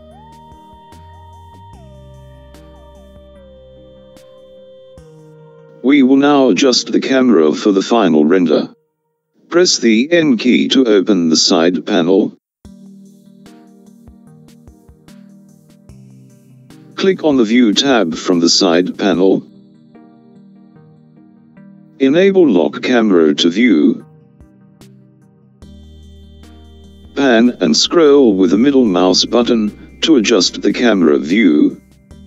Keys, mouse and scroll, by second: 7.0 n, 10.1 n, 16.7 click, 20.8 click, 25.9 click.